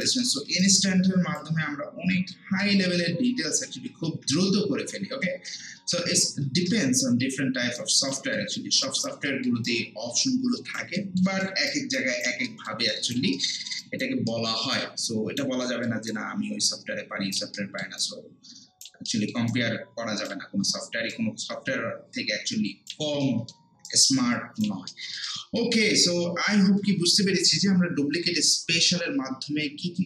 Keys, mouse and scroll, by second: 0.2 alt+middle click, 0.6-2.5 right drag, 2.5 ctrl+z, 7.8 alt+right click, 8.3 alt+middle click, 8.6 alt+scroll down 1, 8.8 alt+right click, 9.3 alt+middle click, 9.6 alt+right click, 11.0 alt+middle click, 11.4 alt+right click, 12.5 alt+middle click, 12.9 alt+right click, 13.3 alt+middle click, 13.8 alt+right click, 14.3 alt+middle click, 14.7 alt+right click, 15.6 alt+middle click, 16.1-17.6 alt+right drag, 17.6 alt+middle click, 18.0 alt+right click, 19.1 alt+middle click, 19.5-23.2 alt+right drag, 23.2 alt+middle click, 23.9 alt+right click, 24.9 alt+middle click.